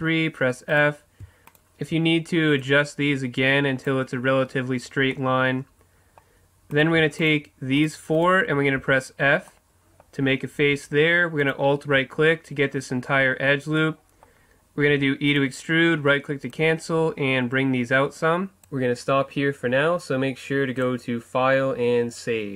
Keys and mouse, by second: 0.0 f, 0.9-3.4 right drag, 2.7-4.4 drag, 5.4-6.7 middle drag, 6.7-9.2 right drag, 8.8 f, 9.2-11.4 middle drag, 11.4-13.8 right drag, 13.8-14.9 middle drag, 14.9 e, 16.5-18.3 drag, 20.8-22.5 drag.